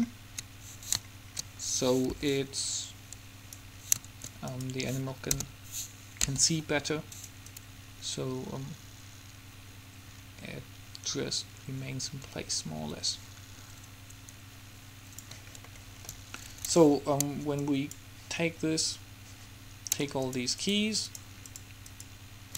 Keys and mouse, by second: 2.2 b, 5.6 k, 6.4 g, 7.7-9.3 drag, 15.9-19.3 middle drag, 19.3 click, 20.4-22.1 drag.